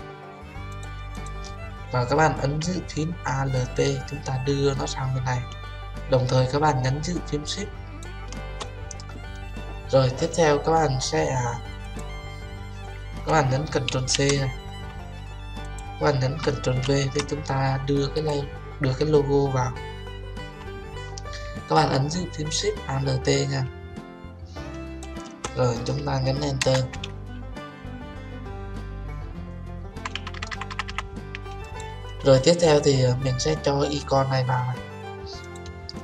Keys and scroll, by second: 13.9 ctrl+c, 16.9 ctrl+v, 26.6 Return.